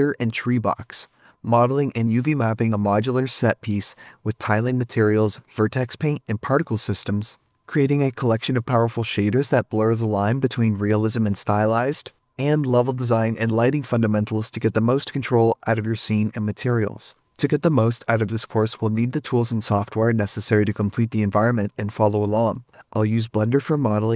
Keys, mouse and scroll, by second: 0.0 middle click, 0.1 middle click, 0.4-0.8 scroll up 4, 1.2 ctrl+z, 1.6 middle click, 1.7 middle click, 1.8 shift+middle click, 2.9 scroll up 4, 3.1-5.4 middle click, 4.2 shift+middle click, 4.9 middle click, 6.1 shift+s, 6.3 middle click, 6.4 middle click, 6.9 shift+click, 7.0 shift+click, 7.5 right click, 7.9 l, 8.2 Return, 9.0 right click, 9.2 right click, 9.6-10.1 typing, 13.7 scroll down 14, 14.1 middle click, 14.3-14.6 scroll up 10, 17.2 alt+middle click, 17.7 shift+middle click, 17.8-19.6 typing, 19.2 ctrl+click, 20.4 Tab, 20.6 middle click, 20.7 scroll down 4, 20.9 middle click, 21.0 middle click, 21.3 Tab, 21.4 a, 21.6 alt+h, 21.8 shift+middle click, 22.1 l, 22.3 p, 22.5 Tab, 22.6 Tab.